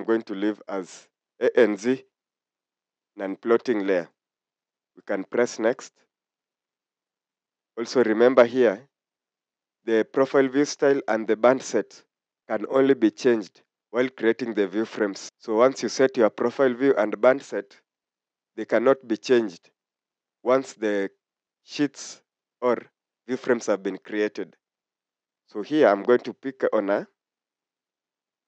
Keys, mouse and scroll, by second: 5.5 click, 27.2-28.4 scroll up 1.